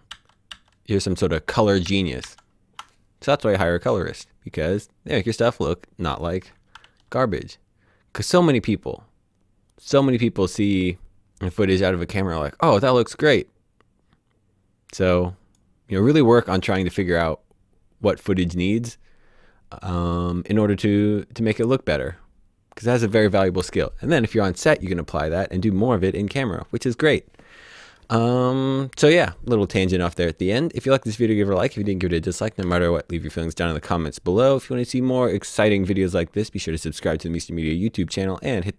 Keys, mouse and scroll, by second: 0.2 d, 0.6 d, 1.7-2.3 typing, 3.5 typing, 4.1 click, 6.9 alt+d, 13.2 click, 16.8 alt+d, 32.0 click, 32.7 alt+s, 33.3 right click.